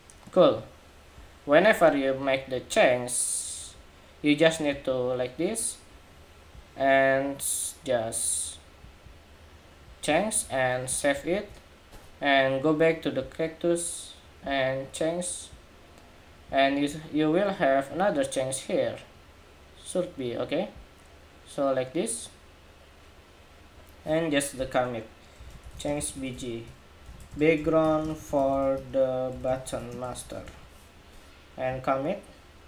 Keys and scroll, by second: 11.0 super+s.